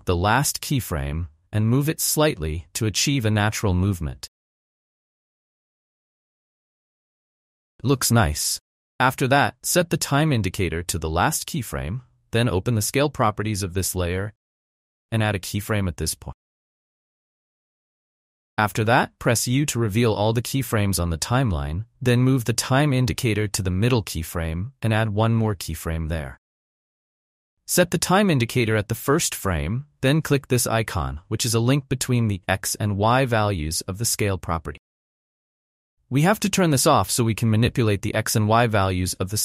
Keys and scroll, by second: 5.2 space, 9.7 space, 15.0 s, 19.9 u.